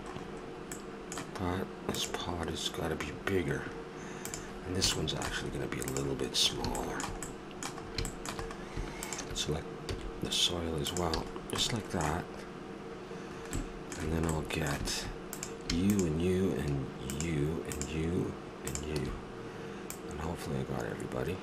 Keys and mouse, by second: 5.4 middle click, 5.9-7.4 drag, 7.4-8.5 middle drag, 9.0-11.0 drag, 9.9 s, 11.2 a, 15.3-18.4 right drag, 18.4-21.4 drag.